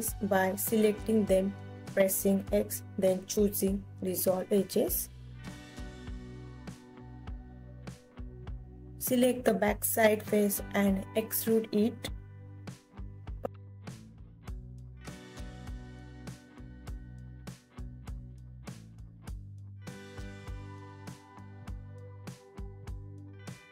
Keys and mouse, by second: 1.3-2.4 alt+drag, 3.6 alt+click, 4.6 click, 5.5 x, 7.0 alt+click, 9.5 middle click, 11.1 KP_3, 12.4 middle click, 14.4 e, 20.5 click, 22.1 click.